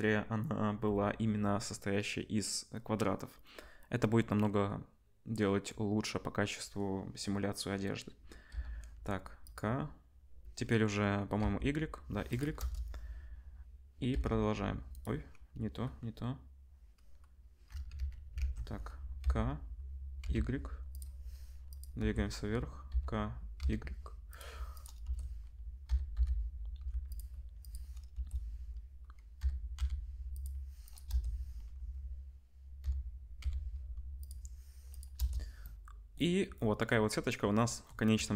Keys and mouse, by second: 8.5 k, 14.1 i, 15.0-19.2 middle drag, 17.9 ctrl+z, 19.2 k, 22.9 k, 25.9 k, 29.4 k, 32.8 k.